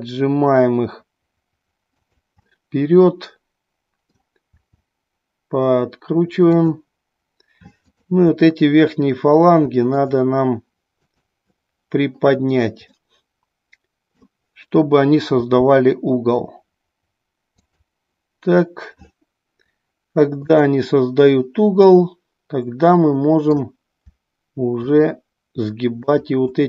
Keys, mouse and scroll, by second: 2.5-4.2 middle drag, 4.5 r, 6.6 click, 7.8-9.1 drag, 9.8-11.1 drag, 12.9-14.3 middle drag, 15.3 r, 17.7 click, 20.5-21.8 drag, 21.9-23.5 middle drag, 24.8 click.